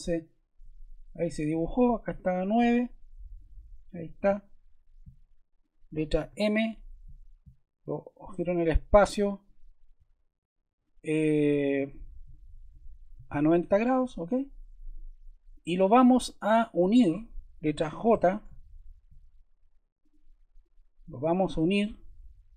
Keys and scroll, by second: 6.2 m, 13.1 0, 13.9 Return, 18.1 j.